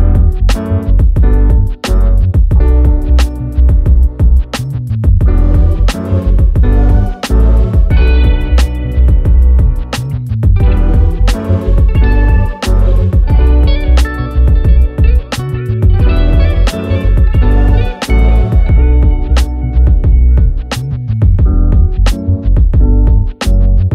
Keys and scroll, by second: 9.0 ctrl+k, 12.0 ctrl+z.